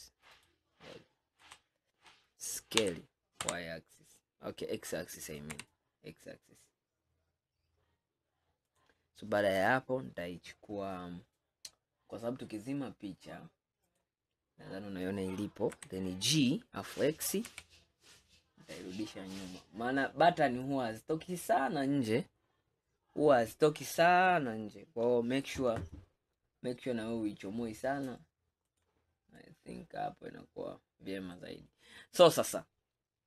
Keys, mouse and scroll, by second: 1.5 KP_1, 2.9 s, 11.4-14.0 scroll up 1, 14.0 click, 15.8 g, 29.4-31.8 middle drag, 31.8-32.4 scroll down 1, 32.4 scroll down 1.